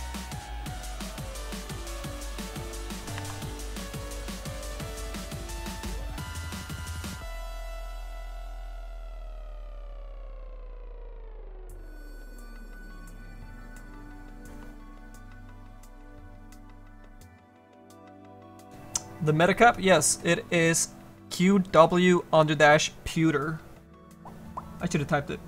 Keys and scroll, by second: 3.1 ctrl+z.